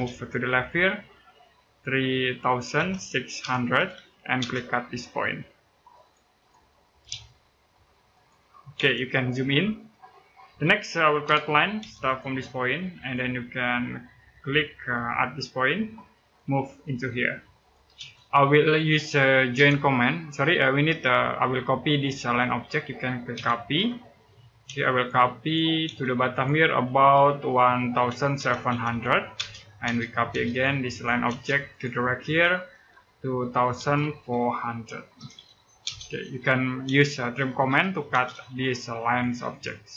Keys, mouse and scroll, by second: 2.5-4.2 typing, 5.7 click, 6.9 ctrl+z, 7.9 click, 8.5 space, 9.1 scroll up 1, 9.7 middle click, 11.0 l, 11.6 space, 12.7 click, 16.0 click, 17.7 space, 19.3 j, 20.5 Escape, 23.1-24.5 typing, 24.7 click, 25.6 space, 26.1 click, 27.5-29.2 typing, 30.3 click, 31.1 space, 31.5 click, 33.5-35.6 typing, 37.2-38.1 typing, 38.4 click.